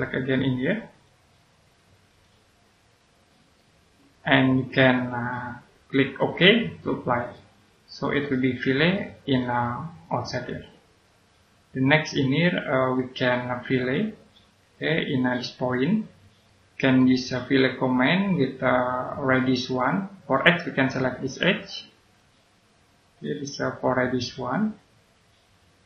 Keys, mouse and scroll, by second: 0.9 click, 3.5 right click, 5.2-7.0 scroll down 1, 7.0 click, 8.0-8.9 scroll down 1, 8.9 click, 9.6 right click, 14.6-16.4 scroll up 1, 16.4 middle click, 18.2 click, 20.3-22.0 scroll up 1, 22.0 click.